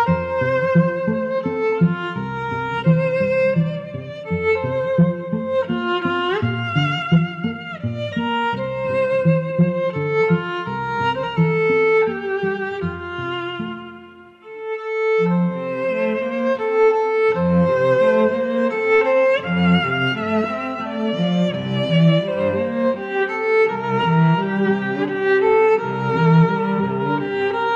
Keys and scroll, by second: 3.5 i, 10.5 i, 11.3 i.